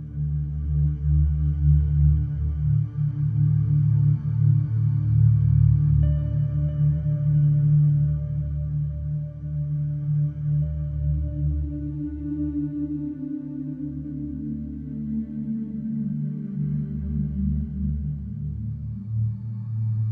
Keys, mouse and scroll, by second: 0.2 scroll, 0.8-1.2 scroll, 4.2-4.8 scroll, 4.8 click, 5.9-7.0 drag, 7.1 click.